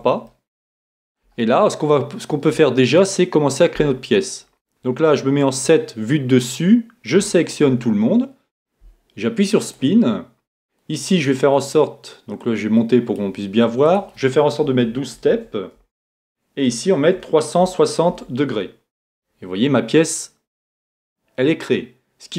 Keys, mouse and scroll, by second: 0.3-3.3 middle drag, 5.5 KP_7, 7.2 a, 7.6 a, 9.6-11.5 drag, 12.4-19.5 drag, 20.6-22.3 middle drag.